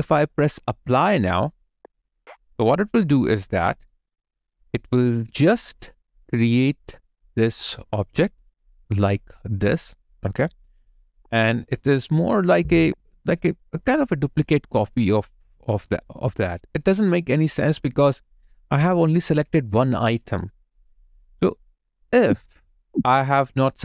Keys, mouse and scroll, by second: 12.4 double click, 22.0 ctrl+z.